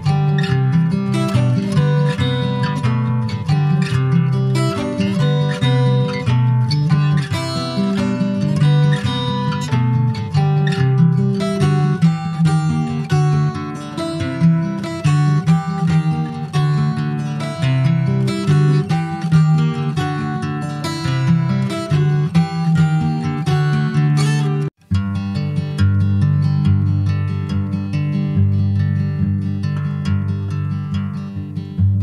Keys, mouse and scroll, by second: 0.8 3, 1.0 click, 1.9-2.3 scroll down 2, 2.3 alt+middle click, 2.8 alt+middle click, 4.5-5.9 shift+middle drag, 5.9 e, 8.8 click, 10.1 e, 12.0-13.0 middle drag, 13.0 click, 13.5 alt+shift+click, 14.0 alt+shift+click, 14.6 middle click, 14.9 e, 15.3 alt+s, 18.5 middle click, 19.3 click, 20.4 alt+shift+click, 21.2 alt+middle click, 21.8 alt+middle click, 22.8 click, 24.3 Tab, 24.4 click, 24.7-25.1 scroll down 5, 25.1 ctrl+s, 25.5 shift+middle click, 25.7 shift+scroll up 1, 25.8 click, 26.4 scroll up 3, 27.3 click, 29.3 click, 29.7 middle click, 29.9-30.3 scroll up 2, 30.3 click, 31.0 ctrl+a.